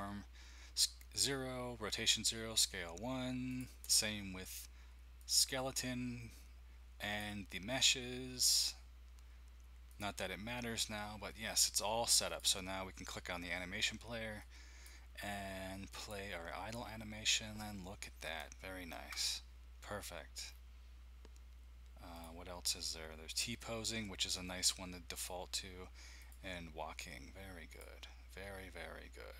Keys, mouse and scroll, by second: 3.6 click, 5.3-6.3 drag, 7.2 click, 10.0-11.4 drag, 12.2 click, 14.4 click, 15.9 click, 16.8-17.8 scroll up 1, 18.4 ctrl+middle click, 20.6-21.4 scroll down 1, 22.1 click, 23.3-26.1 drag, 26.2-28.3 drag.